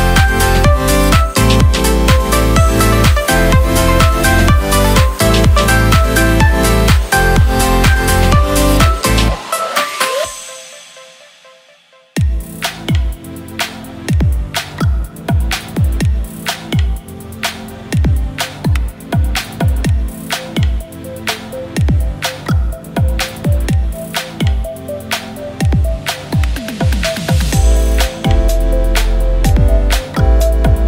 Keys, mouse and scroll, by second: 12.3-13.9 typing, 14.5 Return, 15.2 Caps_Lock, 20.5 shift+click, 22.6 alt+shift+click, 25.7 Caps_Lock, 25.9-27.0 typing, 28.5 alt+shift+click.